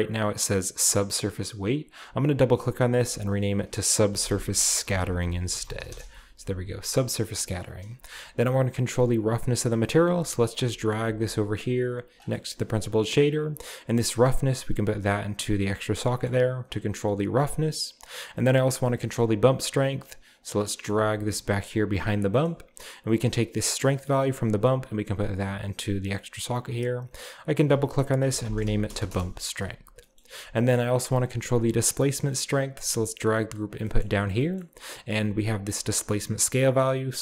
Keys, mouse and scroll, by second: 0.2 click, 1.9-4.0 drag, 4.1-7.0 typing, 6.8 middle click, 7.5-8.6 scroll down 1, 9.2 click, 9.5 scroll down 1, 10.2 g, 10.5 click, 11.1 g, 12.1 click, 12.7-14.1 scroll up 1, 12.7-14.1 middle drag, 14.6-15.9 drag, 15.9-18.4 middle drag, 15.9-18.4 scroll down 1, 18.8 middle click, 19.2-20.4 middle drag, 19.2-20.4 scroll up 1, 20.4 drag, 20.7-22.1 scroll down 1, 20.7-22.1 middle drag, 21.0 g, 22.1 drag, 22.5-23.5 scroll up 1, 22.6-23.5 middle drag, 24.3-26.1 drag, 27.0 click, 27.1 click, 27.6 click, 28.3 shift+click, 28.3-30.0 typing, 29.1 Return, 29.7-31.8 scroll down 1, 30.2 middle click, 30.8-31.8 middle drag, 31.9 click, 32.8 g, 33.6 click, 34.1-35.4 scroll up 1, 34.6-35.4 middle drag, 35.4 scroll up 1, 35.7 click, 36.8-37.2 drag.